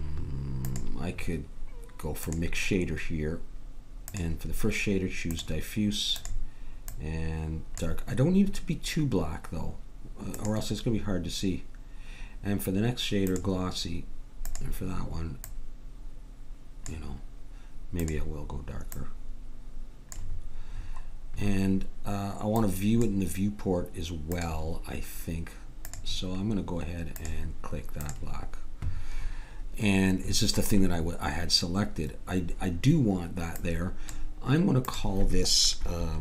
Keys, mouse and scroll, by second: 0.6-6.0 drag, 6.2-8.0 drag, 10.4-12.2 drag, 14.4-16.2 drag, 18.0-19.8 drag, 20.8-22.6 middle drag, 22.6-24.3 drag, 22.6 right click, 24.4-27.8 drag, 29.2-32.0 middle drag, 33.6-36.2 drag.